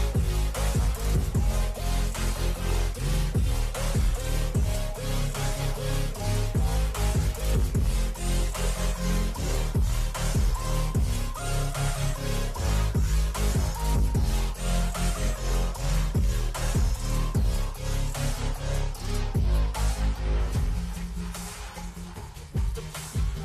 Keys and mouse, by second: 0.0 click, 2.9 Return, 5.9 click, 7.0 click, 8.4 Return, 9.8 ctrl+click, 11.3 ctrl+g, 12.2 click, 12.4 click, 13.5-16.9 typing, 17.1 Return, 19.6 click, 20.1 click.